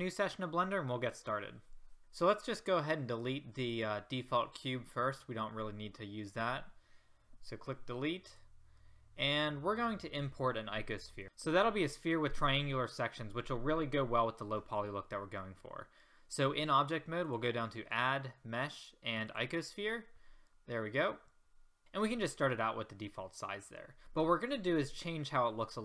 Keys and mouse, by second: 7.2 Delete, 21.1-22.5 middle drag.